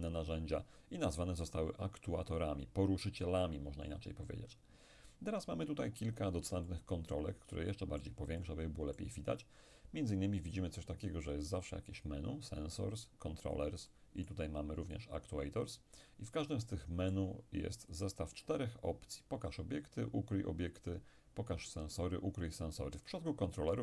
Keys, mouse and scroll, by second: 6.7-10.0 ctrl+middle drag, 11.3-18.9 drag, 13.9-18.9 middle drag, 23.1 click.